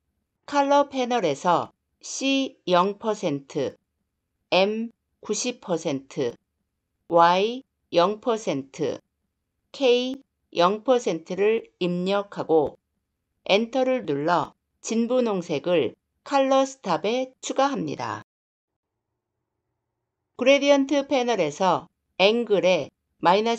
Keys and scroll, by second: 13.3 Return.